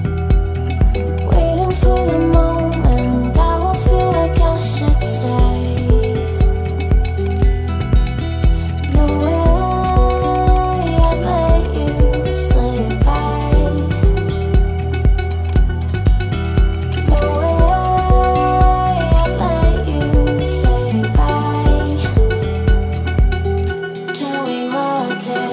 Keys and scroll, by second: 5.1 ctrl+z.